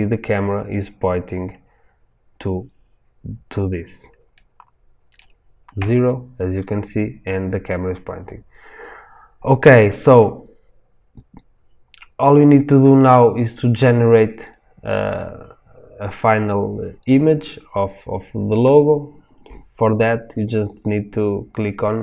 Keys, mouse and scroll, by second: 0.2 scroll up 2, 5.7 KP_0, 12.9 click, 13.1-17.8 middle drag, 14.3 click, 19.1-22.0 middle drag.